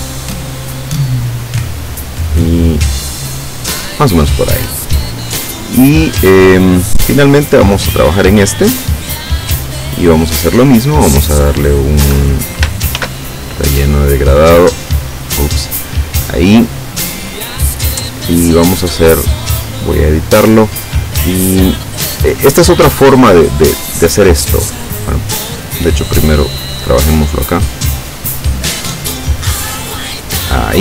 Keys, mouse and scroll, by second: 1.3-3.3 drag, 4.8 click, 7.7 click, 8.7 click, 10.7 click, 12.1 Escape, 13.0 ctrl+shift+f, 14.6 click, 15.3 click, 17.0 click, 19.7 click, 22.7 click, 24.0 click, 25.2-26.5 drag, 27.6-30.7 drag.